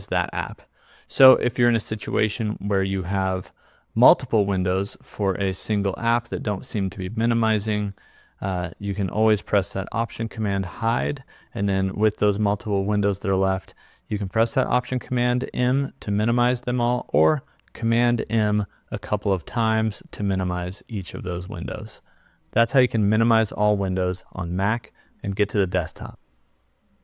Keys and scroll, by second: 10.8 alt+super+h, 18.2 super+m.